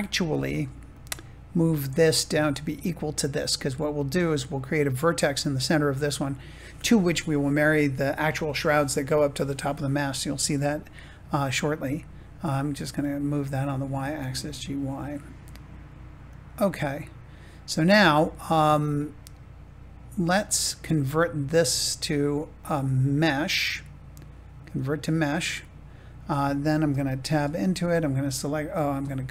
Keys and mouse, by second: 0.1 Tab, 0.9 click, 12.3 g, 12.8 y, 16.2 click, 16.9 middle click, 20.2 Tab, 22.5-24.8 drag, 27.1 Tab, 27.6 a.